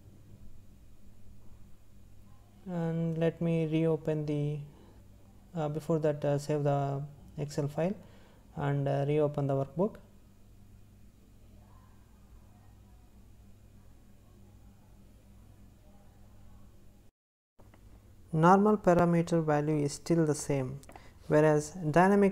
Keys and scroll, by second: 2.4 ctrl+s.